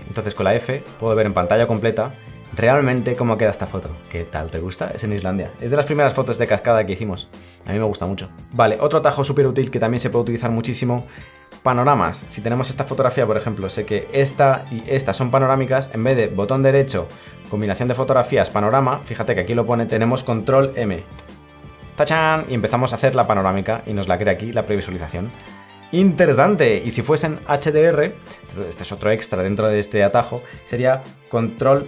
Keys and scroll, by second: 6.9 f, 21.1 ctrl+m.